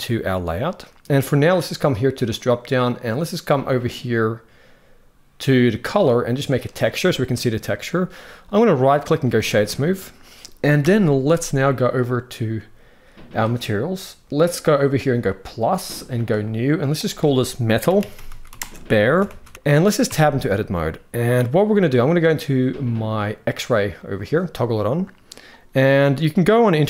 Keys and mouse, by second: 0.0 click, 0.5 middle click, 2.0-6.5 drag, 7.6-7.9 middle drag, 8.4-9.0 right drag, 10.5 KP_1, 15.0 click, 16.0 click, 16.6-19.5 drag, 19.8 Tab, 20.2 shift+middle click.